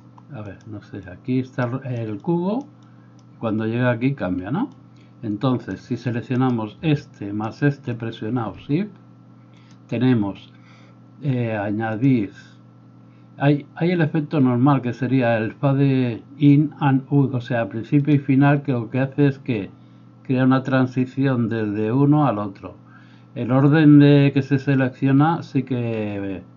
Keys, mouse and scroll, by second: 6.4 middle click, 6.4 right click, 7.4 shift+middle click, 7.4 shift+right click.